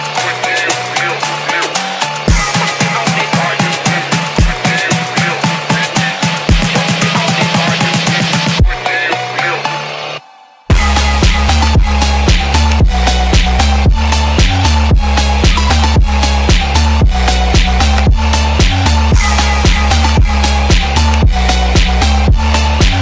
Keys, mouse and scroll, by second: 2.9-4.0 middle drag, 4.7-5.8 drag, 6.6 middle click, 7.8-14.4 drag, 14.8-15.9 middle drag, 15.9-16.4 scroll down 2, 16.3 ctrl+middle click, 21.9-23.0 drag.